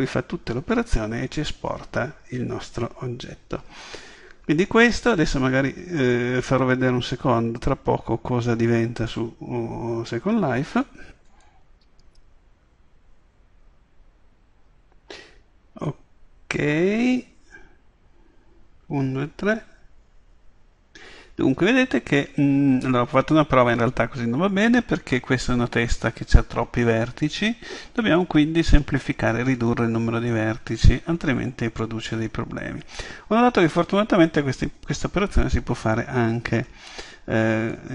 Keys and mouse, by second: 37.7-37.9 drag.